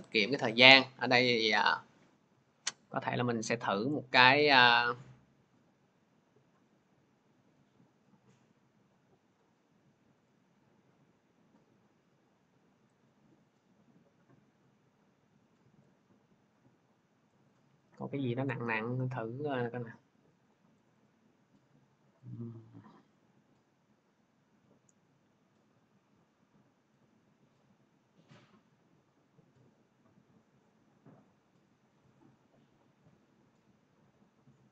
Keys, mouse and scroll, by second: 6.5 click, 9.2 click, 12.7 click, 17.1 click, 18.6 click, 20.7 click, 22.1 click, 22.4-23.1 scroll, 24.5-25.1 scroll, 26.9 click, 28.2 scroll, 29.4 scroll, 32.0 click, 32.2 click.